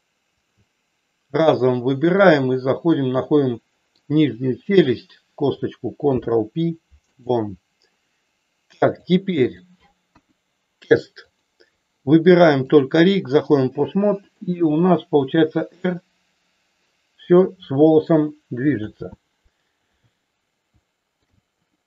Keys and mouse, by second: 0.2 shift+click, 1.5 click, 3.3 middle click, 4.7 click, 6.0 ctrl+p, 8.8 click, 10.1 KP_1, 11.2 click, 12.6 click, 14.2 click, 15.1 r, 18.8 ctrl+z, 20.7 shift+middle click.